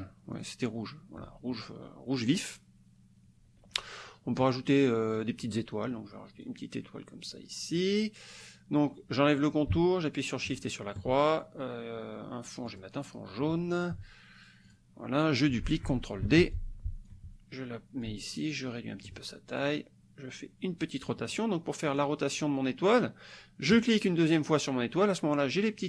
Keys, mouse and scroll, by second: 0.5 shift+click, 5.2 click, 6.5-8.0 drag, 10.6 shift+click, 12.7 click, 14.7 click, 16.2 ctrl+d, 16.5 ctrl+click, 18.1-19.2 ctrl+drag, 19.6 click, 21.4 click, 22.0 click, 23.8 click.